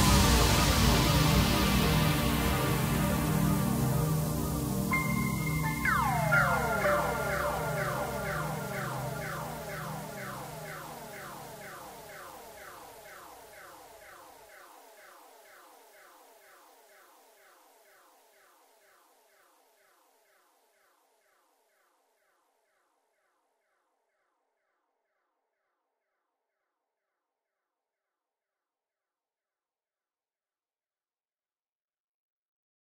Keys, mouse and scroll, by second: 5.2-7.7 drag, 7.7-8.6 middle drag, 8.6-9.4 scroll down 1, 9.4 KP_1, 10.9 g, 17.0-17.5 scroll up 3, 17.5-18.1 middle drag, 18.1-18.5 scroll up 3, 18.5-21.5 middle drag, 24.4-25.9 scroll down 4, 25.9 KP_1, 27.0 click, 28.5 click, 28.9 click, 29.6-30.1 drag.